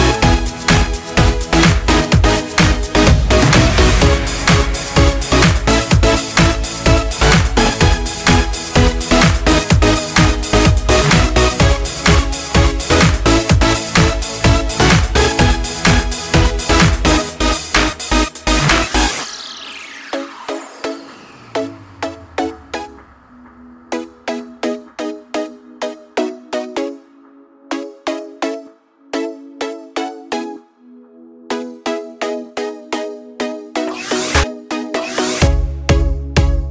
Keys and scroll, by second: 8.3 ctrl+z, 10.9 ctrl+Return, 19.9 alt+BackSpace, 24.0 ctrl+d, 35.3-36.7 typing.